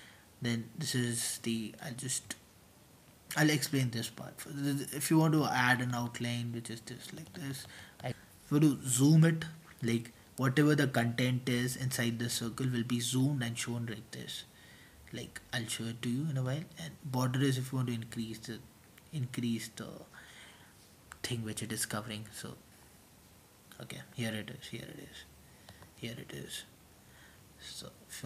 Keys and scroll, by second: 7.4-8.1 typing, 14.4-15.1 typing, 21.5-23.0 typing.